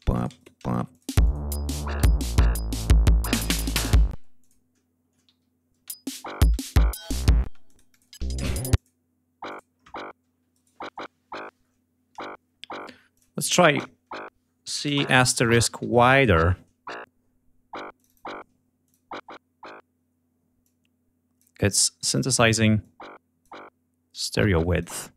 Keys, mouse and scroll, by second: 0.0 shift+click, 0.3 shift+right click, 0.8 shift+click, 0.9 shift+space, 1.1 alt+shift+click, 1.4 alt+shift+d, 2.0 ctrl+scroll down 2, 2.2 ctrl+scroll up 2, 3.3 click, 4.0 space, 4.3 click, 5.2 e, 5.6 space, 6.4 g, 6.6 ctrl+scroll down 2, 7.3 space, 7.5-8.1 ctrl+drag, 8.0 ctrl+space, 8.6 click, 9.4 click, 10.4 right click, 13.0 click, 14.6-16.3 typing, 17.8 click, 18.7 click, 20.5 click, 21.6 click, 21.9 click, 22.6 click, 24.0 click.